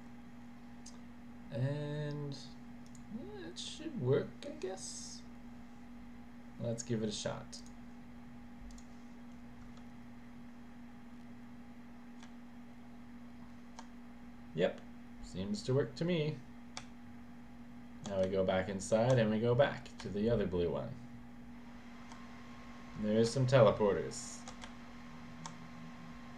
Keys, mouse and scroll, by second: 2.9 click, 7.6 click, 8.7 click, 12.3 w, 16.9 s, 18.4 w, 20.1 w, 23.4 s, 24.7 w.